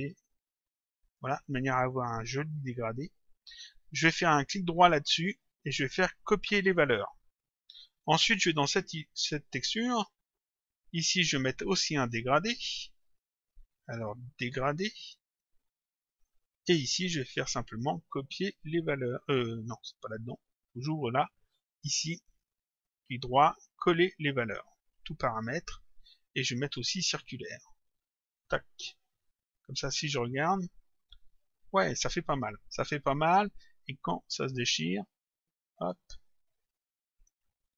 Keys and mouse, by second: 1.2 click, 4.2 click, 5.3 right click, 6.8 click, 8.2 click, 9.6 click, 12.0 click, 14.4 click, 16.6 click, 17.2 right click, 20.1 click, 22.3 click, 22.8 right click, 25.3 click, 26.8 click, 28.3 click, 29.5 click, 34.5 click, 35.8 click.